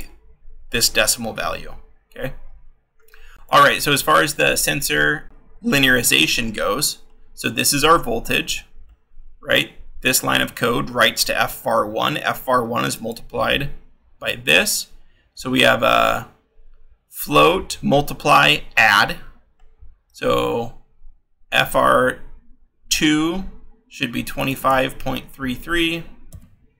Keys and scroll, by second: 26.3 f.